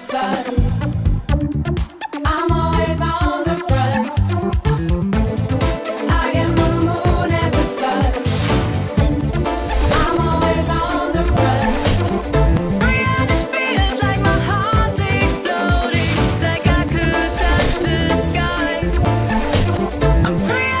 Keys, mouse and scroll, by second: 4.6 click, 5.9-6.5 drag, 6.6 drag, 6.9-20.8 drag.